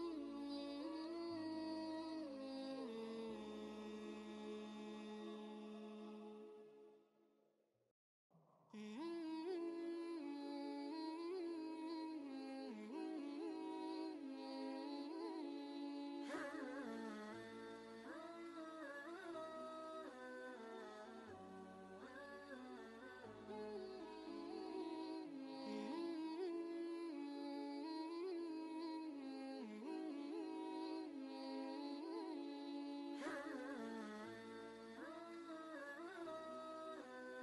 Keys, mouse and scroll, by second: 2.7 ctrl+g, 4.2 click, 5.3 ctrl+space, 5.4 ctrl+click, 5.8 ctrl+space, 6.9-9.7 alt+drag, 9.7 ctrl+space, 12.8 ctrl+space, 12.9 ctrl+click, 13.7-17.9 drag, 20.7 v, 21.8-24.8 shift+drag, 24.8 ctrl+g, 26.0 Down, 27.3 ctrl+space, 27.7 ctrl+click, 27.9 ctrl+space, 29.1 ctrl+space, 29.6 click, 30.0 space, 30.5 ctrl+space, 30.6 ctrl+click, 31.1 ctrl+space, 33.6 click, 36.4 ctrl+space, 36.5 ctrl+click.